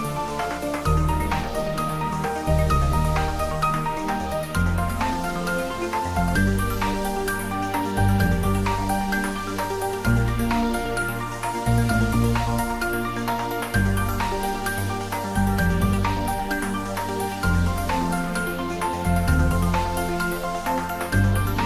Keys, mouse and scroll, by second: 1.5 ctrl+z, 2.2 scroll down 1, 3.2 g, 4.8 click, 5.7 ctrl+z, 6.5 g, 7.0 y, 7.8 click, 8.6-9.0 scroll down 1, 9.0 middle click, 10.3 scroll up 1, 11.4 click, 12.1-13.4 scroll up 1, 13.4-15.3 middle drag, 15.3 middle click, 16.0 scroll down 1, 16.7 scroll up 1, 18.0 click, 19.4 Tab, 20.0 scroll down 1, 20.4-21.6 middle drag.